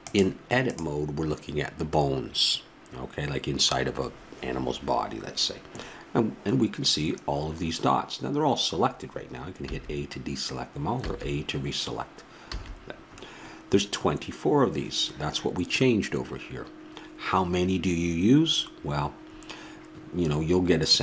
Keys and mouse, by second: 0.0-1.8 drag, 9.7 a, 11.0 a.